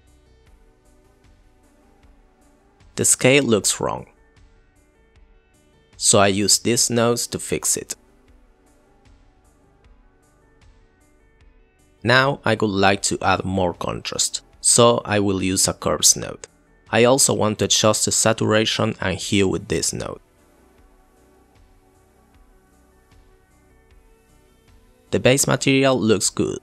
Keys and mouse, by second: 1.7 click, 2.1 click, 6.6 ctrl+t, 7.5-8.5 drag, 11.7 click, 13.4 click, 13.8 click, 14.4 click, 18.1 click, 18.3 click, 18.7 shift+a, 19.0 shift+a, 19.5 click, 20.5 click, 22.5 click, 23.3 click.